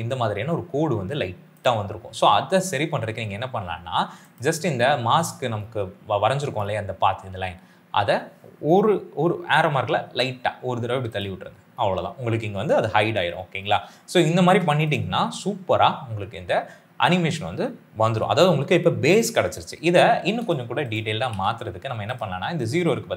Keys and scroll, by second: 10.0 Left, 13.9 space, 21.0 s, 21.2 s.